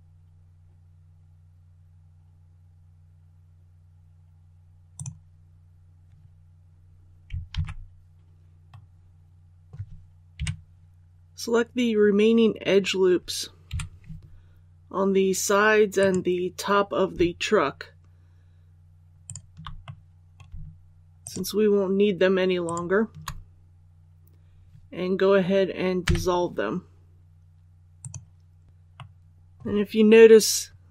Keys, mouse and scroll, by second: 7.4 alt+a, 8.7 middle click, 8.7-9.3 scroll down 1, 9.3 scroll up 1, 9.6 scroll down 1, 9.8 scroll up 1, 10.0-10.3 scroll down 1, 10.3 KP_3, 11.7-12.3 scroll up 1, 13.6 2, 15.9 right click, 19.2 shift+right click, 19.8 middle click, 21.1 shift+right click, 22.6 shift+right click, 26.0 w, 27.9 click, 28.9-30.0 middle drag.